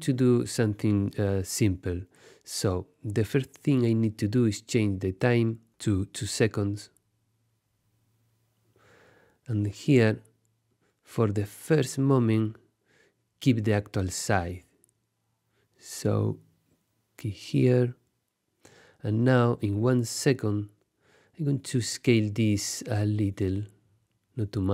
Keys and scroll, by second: 6.3 2, 6.7 0, 7.5 Return.